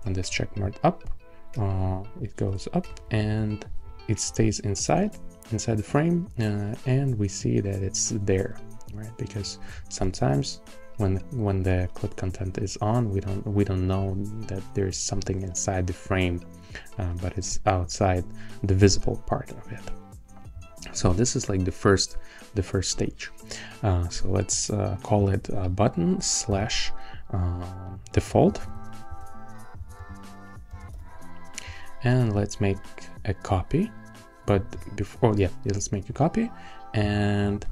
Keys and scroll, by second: 2.7 alt+Up, 10.0 shift+o, 25.7 Right, 26.5 /, 28.2-31.4 typing.